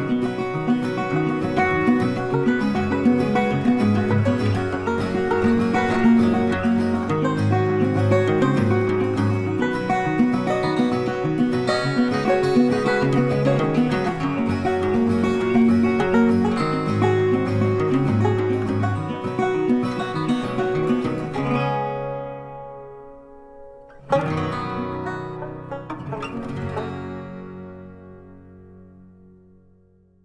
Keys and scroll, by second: 21.7 ctrl+t.